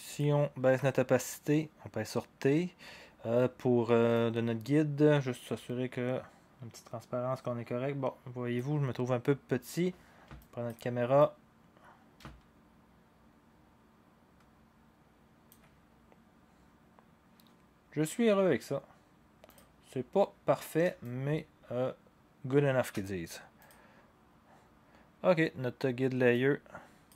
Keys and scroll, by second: 0.7 t.